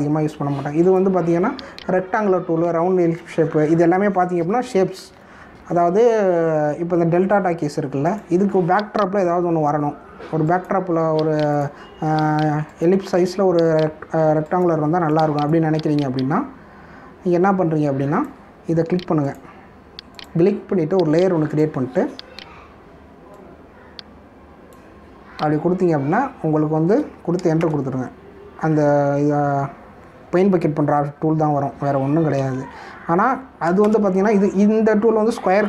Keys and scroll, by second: 10.2 v, 28.6 ctrl+Return, 33.3 ctrl+z, 34.8 ctrl+Return.